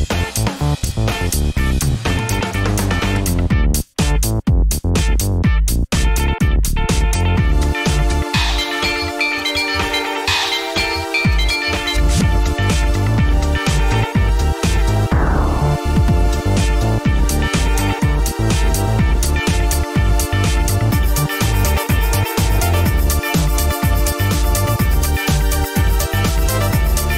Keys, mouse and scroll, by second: 0.0-1.8 typing, 2.0 Return, 3.0-5.5 typing, 6.7-10.6 typing, 12.7-18.8 typing, 20.3 Return, 21.4 Return, 22.7 Return, 24.0 typing, 24.6-25.8 drag.